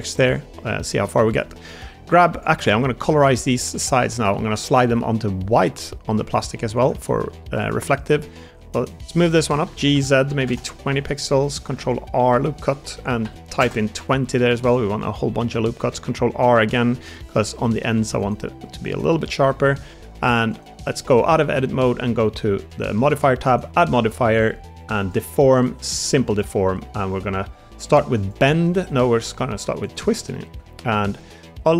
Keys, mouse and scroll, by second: 0.1 Tab, 0.7 middle click, 2.5 middle click, 3.3 middle click, 4.4 shift+middle click, 6.9 middle click, 6.9 g, 7.3 3, 8.1 shift+middle click, 8.8 click, 9.5 g, 9.8 z, 10.1 2, 10.2 0, 10.4 Return, 11.2 shift+middle click, 11.7 ctrl+r, 14.8 middle click, 15.8 ctrl+r, 17.2 shift+middle click, 19.1 middle click, 19.3 3, 20.0 Tab, 30.2 shift+middle drag.